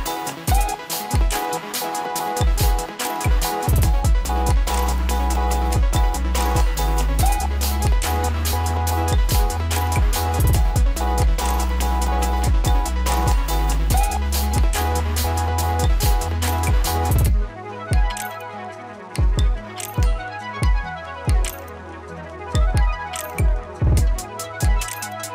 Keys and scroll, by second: 18.3 ctrl+z.